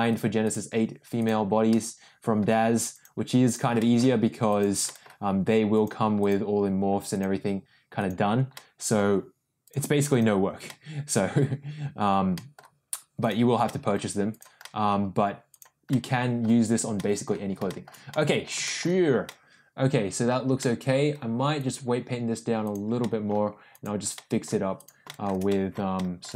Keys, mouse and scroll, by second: 0.0 click, 0.4 click, 1.1 click, 1.6 middle click, 2.9 click, 3.4 click, 3.7 middle click, 4.4 click, 4.8 middle click, 5.7 click, 6.1 click, 7.1 click, 7.9 click, 8.5 middle click, 9.6 click, 10.0 click, 10.6 middle click, 12.3 middle click, 13.2 click, 13.6 middle click, 14.3 click, 14.6 middle click, 15.5 click, 15.9 middle click, 16.9 middle click, 17.6 shift+middle click, 18.1 middle click, 18.6 shift+middle click, 19.2-20.2 middle drag, 20.5 middle click, 21.6 click, 22.6 click, 23.0 middle click, 23.7 click, 24.1 middle click, 24.7 click, 25.0 shift+middle click, 25.5 middle click, 25.9 shift+middle click.